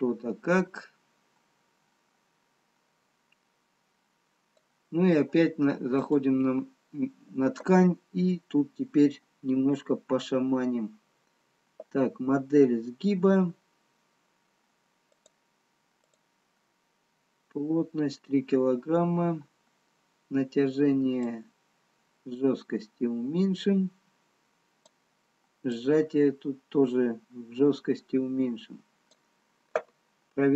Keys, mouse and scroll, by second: 6.5 click, 9.5-10.2 scroll up 5, 10.8-11.6 scroll down 2, 13.1-13.9 scroll down 2, 15.4 click, 20.2-20.8 scroll down 3, 21.5 click, 25.8 click.